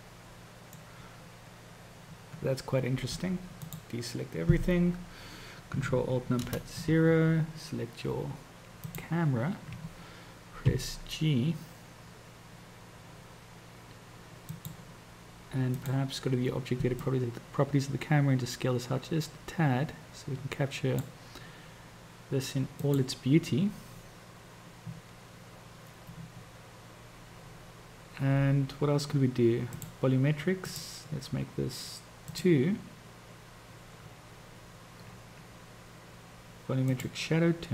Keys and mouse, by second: 10.7 g, 17.2-21.4 drag, 22.7 click, 29.7 click, 30.7-33.0 drag, 37.0 click.